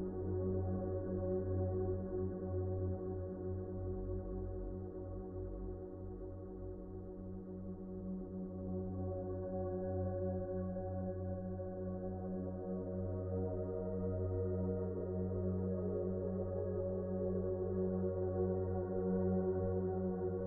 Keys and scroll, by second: 1.9 s, 3.5 s, 7.1 f, 7.9 z, 10.7 2, 15.5 c.